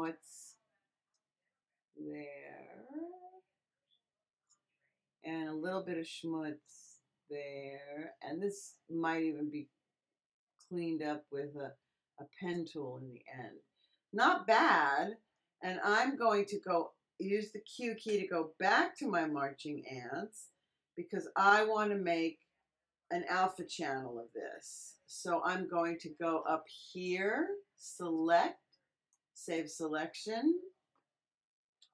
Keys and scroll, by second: 0.0 x, 17.9 q, 31.5-31.9 typing.